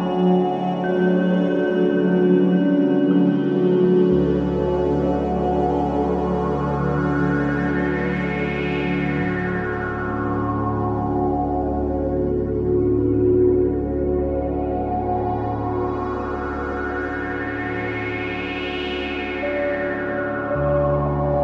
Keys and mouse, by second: 0.0 alt+click, 0.4-1.4 ctrl+alt+drag, 2.0 click, 4.9 alt+click, 5.6 ctrl+alt+click, 6.8 click, 7.2 click, 8.6-10.5 ctrl+alt+drag, 11.4-13.2 ctrl+alt+drag, 13.3 click, 13.6 drag, 14.0 click, 14.6-15.0 drag, 15.5 Delete, 19.1 click, 19.4 click, 19.9 click, 20.1-21.1 typing.